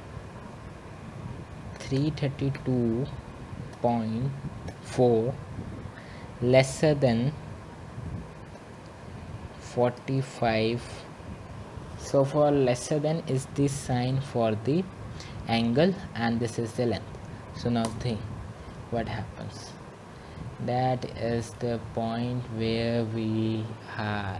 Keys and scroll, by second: 2.1 @, 8.8 typing, 17.8-18.6 typing.